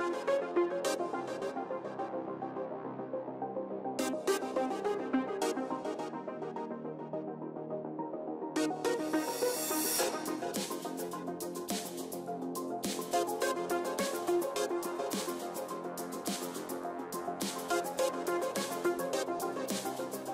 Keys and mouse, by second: 0.8 KP_3, 3.2 e, 4.2-5.9 drag, 6.2 ctrl+z, 7.1 s, 9.4-11.4 drag, 11.9 ctrl+s, 12.5 z, 13.5 a, 14.4 ctrl+n, 14.4 a, 14.9 a, 16.0-17.6 middle drag, 19.2 middle click, 19.8 ctrl+z.